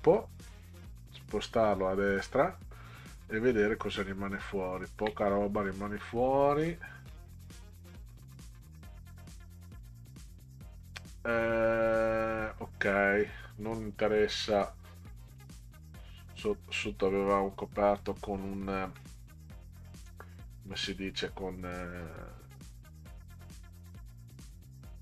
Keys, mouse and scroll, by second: 0.2-1.7 drag, 4.7 ctrl+scroll up 2, 5.7-6.0 middle drag, 6.7-7.1 middle drag, 8.8 click, 9.6 click, 12.5 click, 14.0 click, 14.9 click, 16.8 click, 17.9 click, 19.0 middle click, 20.4-23.5 drag.